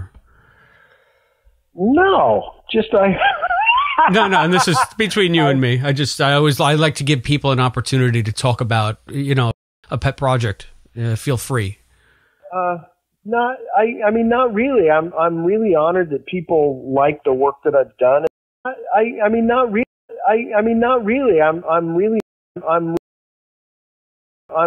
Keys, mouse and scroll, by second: 0.2 click, 1.5-5.4 drag, 6.7 click, 9.4 space, 9.6 click, 9.8 space, 12.0 click, 13.5-15.8 drag, 16.7 click, 18.2 space, 18.5 click, 18.5 space, 19.7 space, 19.9 click, 20.0 space, 22.1 space, 22.4 click, 22.4 space, 22.9 space, 23.3 click, 23.9 click, 24.4 space.